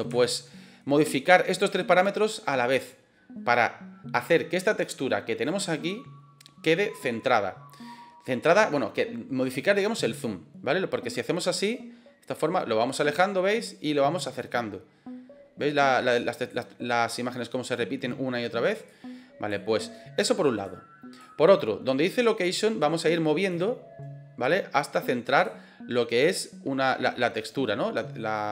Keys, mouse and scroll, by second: 0.1 shift+middle click, 11.5-16.5 drag, 18.8 click, 20.5 click, 23.4-25.4 drag, 26.1-28.5 drag.